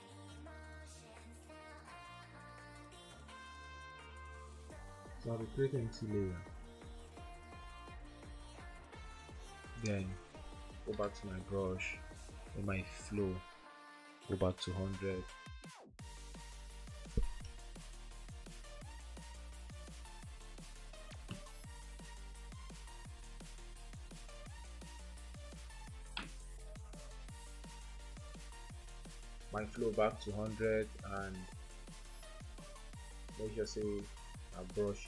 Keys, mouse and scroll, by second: 1.5 typing, 11.1 typing, 16.4-17.1 typing, 28.5 typing.